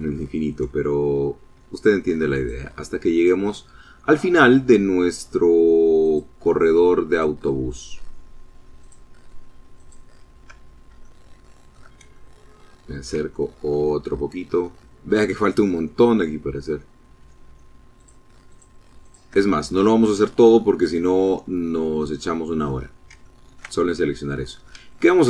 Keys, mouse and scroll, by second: 0.8 shift+click, 1.4 shift+click, 2.2 shift+click, 5.1 shift+click, 6.2 shift+click, 6.7 shift+click, 7.9 shift+click, 8.8 shift+click, 10.1 shift+middle click, 11.2-12.3 ctrl+shift+middle drag, 12.4 ctrl+shift+middle click, 13.4-14.9 shift+middle drag, 17.0 shift+click, 17.6 shift+click, 18.1 shift+click, 18.9-19.5 scroll down 1, 19.5 click, 20.6 click, 21.6-22.0 scroll up 1, 22.3 ctrl+middle click, 22.9-23.9 ctrl+middle drag, 24.0 shift+middle click, 24.7 shift+scroll up 3.